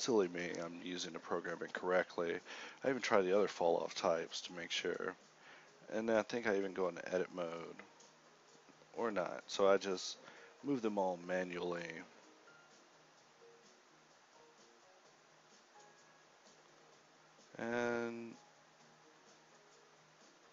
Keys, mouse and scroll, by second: 0.1 g, 2.1 middle click, 2.4 a, 2.6 a, 4.0 middle click, 4.6-6.2 typing, 6.4 click, 7.4-10.9 typing, 11.5 alt+a, 13.7 shift+Left, 14.1 alt+a, 16.4 Escape, 16.9 shift+Left, 17.2 alt+a.